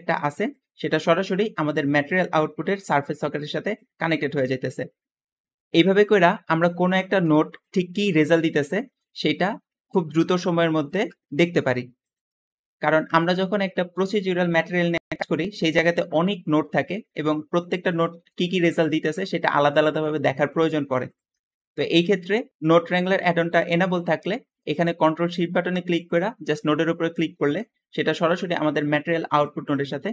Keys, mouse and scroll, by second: 0.7 click, 2.1-3.1 drag, 3.4 click, 3.9 click, 5.6 Escape, 15.1 middle click, 15.9 middle click, 16.4-16.8 scroll down 2, 16.6 middle click, 18.0 g, 19.5 g, 19.5 g, 27.8 `, 28.2-29.3 drag, 29.7 click.